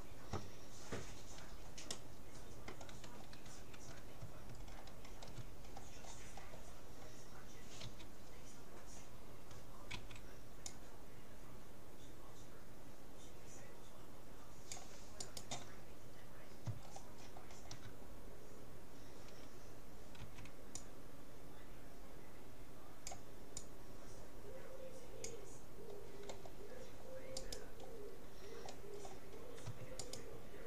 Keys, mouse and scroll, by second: 0.7-3.5 middle drag, 4.7-8.3 middle drag, 7.9 x, 9.9 c, 16.1 middle click, 16.8-17.9 scroll down 1, 17.9 middle click, 18.1 scroll up 1, 18.3-19.5 middle drag, 20.3 c, 27.8-29.1 middle drag, 29.9 middle click, 30.1-30.6 right drag.